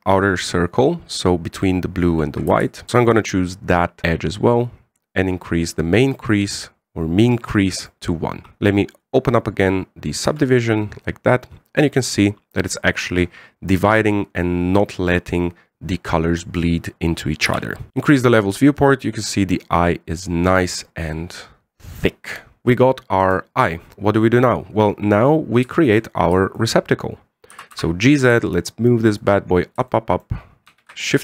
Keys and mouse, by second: 2.9-3.9 middle drag, 5.5 click, 6.9-8.6 middle drag, 9.8 click, 11.1 Tab, 11.4-12.9 middle drag, 17.9 n, 18.9 click, 19.3-22.6 middle drag, 23.0 KP_1, 26.5 shift+middle drag, 27.2 shift+middle click, 28.3 g, 30.7-31.0 shift+middle drag.